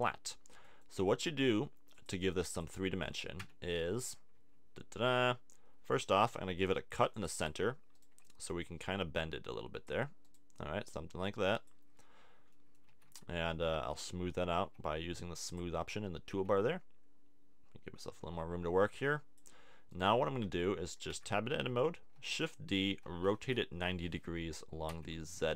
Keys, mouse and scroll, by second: 3.4 Tab, 6.6 ctrl+r, 7.4 click, 8.2-9.3 middle drag, 12.9 a, 13.1 Tab, 14.5 t, 15.9 a, 15.9 t, 16.5 a, 20.2 middle click, 21.1 Tab, 21.5 a, 22.1 shift+d, 22.9 r.